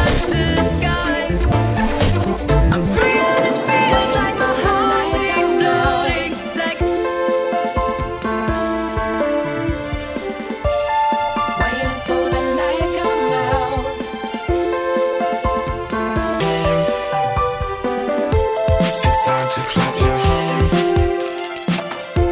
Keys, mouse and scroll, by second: 0.4-1.8 drag, 2.5 click, 3.6 click, 4.4 click, 5.8 click, 6.4 click, 9.4-12.0 typing, 13.0 Escape, 14.7 click, 15.9 click, 16.6-20.2 typing, 21.6-22.3 typing.